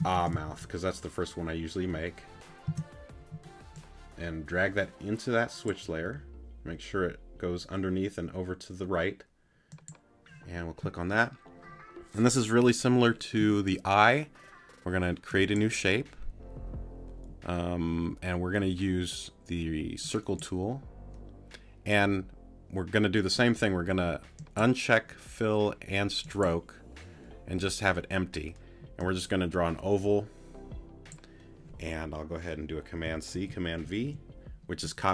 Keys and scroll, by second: 2.7 Return.